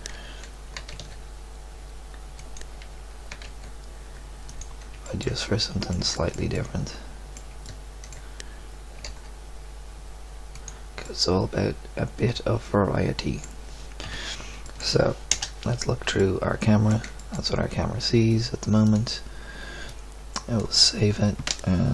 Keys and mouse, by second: 0.7 g, 3.3 g, 7.7-9.0 middle drag, 9.0 g, 11.0 drag, 14.0 KP_1, 14.6 middle click, 15.3 KP_0, 15.4 middle click.